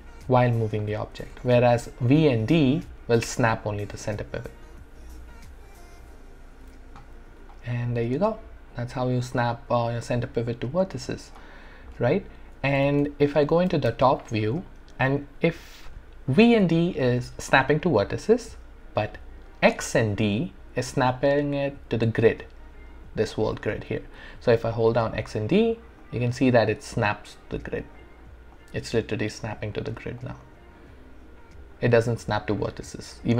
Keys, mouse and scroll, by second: 1.3 ctrl+z, 2.2-4.5 typing, 5.8-6.8 typing, 7.5-12.0 alt+drag, 12.0 alt+middle click, 12.8 space, 14.9-16.7 scroll up 1, 24.2-26.6 typing, 27.7-31.1 typing, 30.2 click, 32.1-33.3 typing.